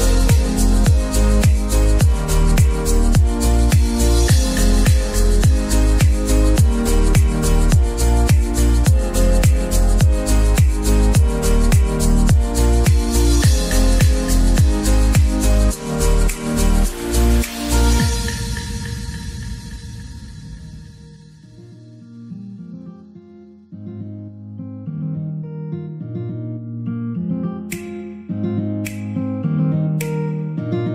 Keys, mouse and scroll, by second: 1.8 s, 3.1-5.9 middle drag, 5.9 scroll down 4, 6.1-8.2 middle drag, 8.2-8.6 scroll up 3, 8.6 middle click, 10.6 g, 12.4 scroll down 1, 12.7-13.7 middle drag, 13.7-14.6 scroll up 6, 14.6 ctrl+3, 15.1-16.2 shift+middle drag, 16.2 click, 16.7-18.0 right drag, 18.0 Tab, 18.2 middle click, 18.9 ctrl+r, 19.8-20.1 scroll up 1, 20.2 click, 20.8 s, 22.9 click, 23.6 ctrl+r, 24.1-24.4 scroll up 1, 24.4 click, 24.5 s, 26.1 right click, 26.6 s, 29.9 click, 30.3-30.9 middle drag.